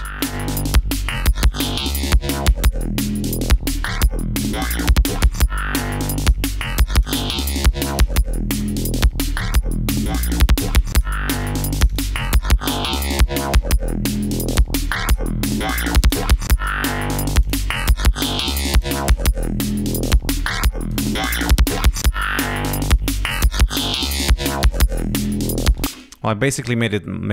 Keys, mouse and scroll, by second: 0.2-1.3 drag, 1.5 click, 2.7 click, 3.8 click, 6.2 click, 6.9 click, 7.8 click, 8.8-9.1 scroll down 2, 9.5-11.2 drag, 11.7 click, 12.4 scroll down 2, 13.1-14.6 drag, 14.8 click, 15.9 click, 16.7 scroll down 2, 17.4 click, 18.7 click, 20.1 scroll down 2, 20.4 click, 21.1 scroll down 2, 21.4 click, 22.4 scroll up 2, 22.8 click, 25.5 click, 26.2 space.